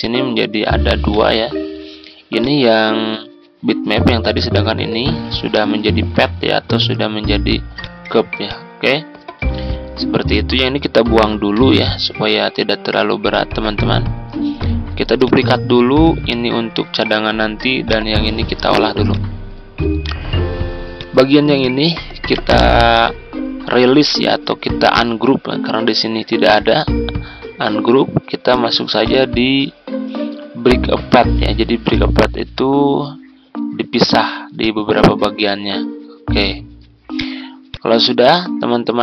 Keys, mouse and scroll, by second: 10.2 click, 11.6 Delete, 13.2 click, 14.6 ctrl+d, 15.2-20.4 drag, 18.8 z, 22.2 right click, 28.4 click, 36.0 scroll down 1, 37.1 click.